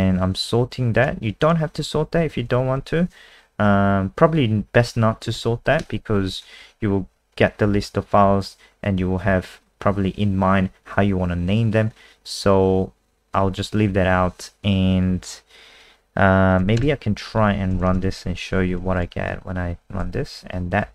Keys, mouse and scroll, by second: 2.3 Home, 2.8 ;, 14.1 Down, 16.8 BackSpace, 17.5 End, 17.7 Return, 17.9 Return, 18.0 typing, 18.8 ctrl+s, 18.9 click, 19.3 F5.